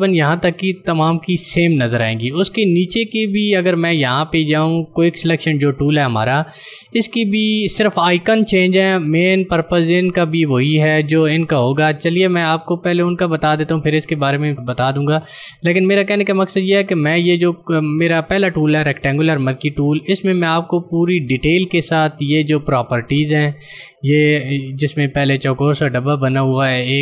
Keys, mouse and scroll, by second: 7.8 click, 16.7 click.